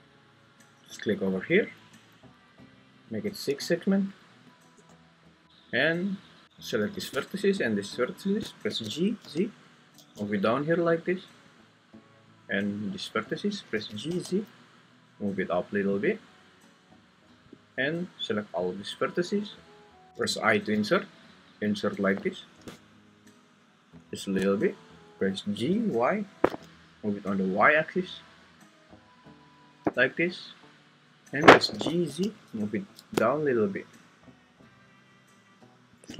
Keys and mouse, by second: 1.8 Escape, 3.4-4.8 drag, 5.4 Escape, 8.7 g, 9.2 z, 9.9 Escape, 10.0 z, 12.4 click, 14.1 g, 14.1 z, 17.5 click, 17.8-19.4 drag, 20.1 ctrl+z, 20.1 `, 20.2 i, 24.2 shift+click, 25.5 g, 25.9 y, 31.7 g, 32.0 z, 36.0 shift+click.